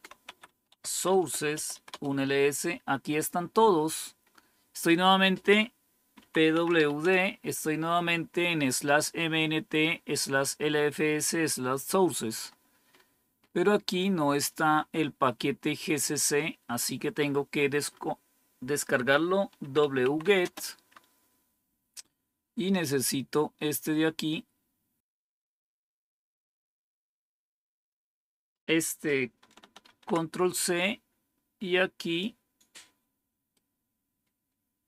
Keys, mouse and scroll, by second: 0.0-2.1 typing, 5.8-7.2 typing, 12.2 scroll up 2, 16.7-17.9 scroll down 8, 19.3-20.6 typing, 25.3-27.8 drag, 29.8 ctrl+c, 31.9 click, 33.4 right click, 34.5 right click.